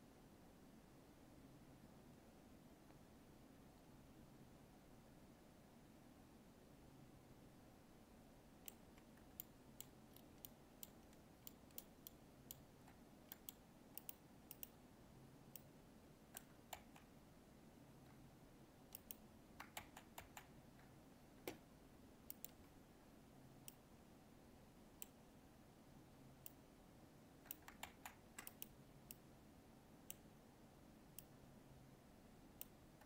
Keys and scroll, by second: 16.7 ctrl+z, 27.8 ctrl+z.